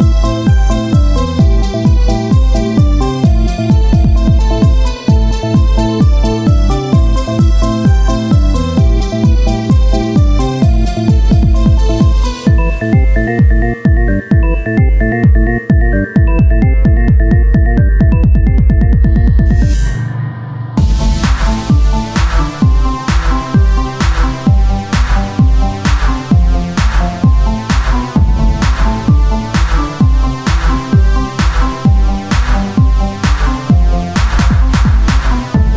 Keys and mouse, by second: 0.0 KP_1, 0.4 z, 3.0 s, 4.2 Tab, 5.5 KP_1, 5.9 z, 7.5 ctrl+Tab, 9.1 click, 10.0 z, 11.3 Tab, 12.4 r, 13.6-14.9 ctrl+drag, 16.0 r, 18.1-19.9 drag, 19.9 KP_1, 25.2 Tab, 25.9-27.1 drag, 27.1 KP_3, 27.9 z, 28.6 e, 30.4 z, 31.4 KP_1, 32.7 z, 34.2 Tab, 34.5 z.